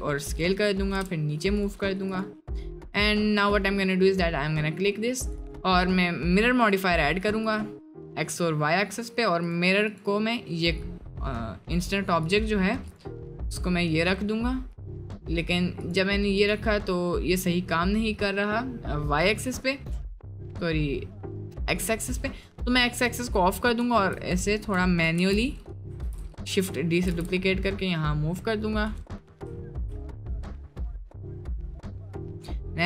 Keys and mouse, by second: 0.6 middle click, 0.9 g, 2.2-2.5 drag, 2.5 middle drag, 3.1 middle click, 5.3-6.8 drag, 7.5-8.5 drag, 8.5 middle click, 11.4 middle drag, 12.3 click, 13.3 middle click, 15.8 click, 16.8-17.7 middle drag, 18.0 middle click, 19.2 click, 21.3 right click, 21.6-22.1 shift+middle drag, 23.2 click, 24.5 shift+middle click, 25.2 shift+s, 27.1 g, 29.6 shift+middle drag, 30.1-30.4 middle drag, 30.9-31.5 middle drag, 32.4-32.7 middle drag.